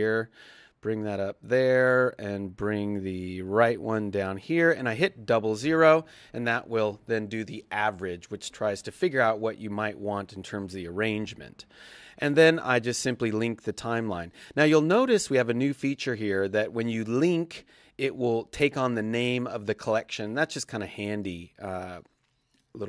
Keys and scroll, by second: 5.5 alt+0.